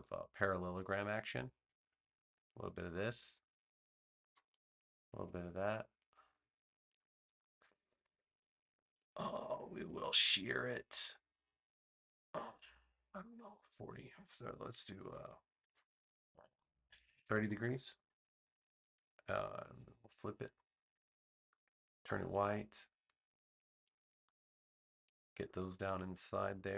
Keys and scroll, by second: 17.0 3, 17.3 0, 17.6 Return.